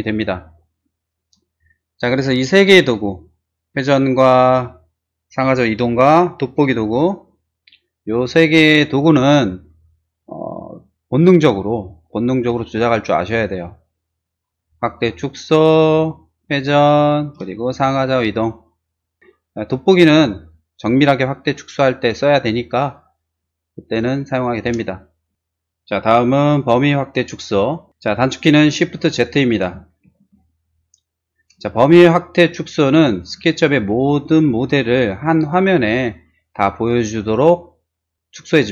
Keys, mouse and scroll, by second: 14.8 middle click, 15.1 middle click, 15.3 middle click, 16.2-19.2 middle drag, 20.1 z, 20.5-22.1 drag, 21.7 z, 22.6-24.0 drag, 24.7 space, 30.0 shift+z, 31.8-33.2 middle drag.